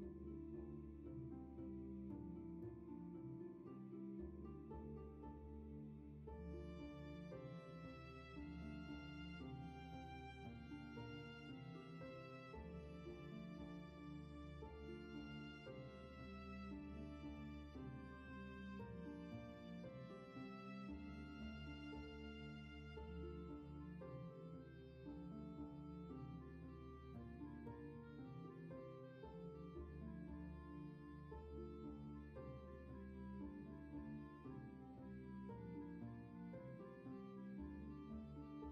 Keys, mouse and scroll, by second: 0.2-0.5 scroll up 1, 2.3 scroll down 1, 2.9 space, 3.4-4.1 scroll down 1, 7.6 scroll up 1, 14.1 scroll down 1, 14.7 space, 16.5-17.0 scroll up 1, 17.0 ctrl+z, 19.9 scroll down 1, 20.6 ctrl+z, 21.0-21.8 scroll up 1, 21.8 ctrl+z, 23.4 scroll down 1, 24.1 space, 24.8 scroll down 1, 26.1 scroll up 1, 30.4-30.7 scroll down 1, 30.8 space, 32.8 space, 34.2 scroll up 1, 37.8-38.7 scroll up 1.